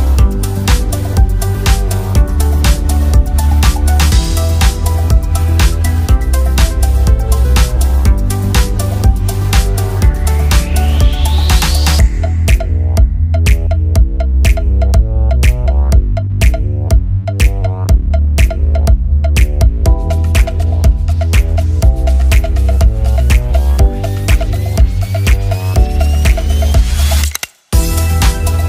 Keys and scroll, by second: 9.4 ctrl+d, 14.9 ctrl+d, 23.3 ctrl+z.